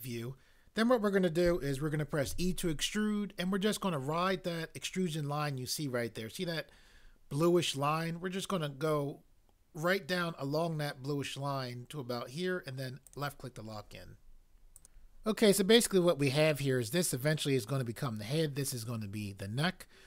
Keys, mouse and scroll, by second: 2.2 e, 13.0 click, 14.7 click.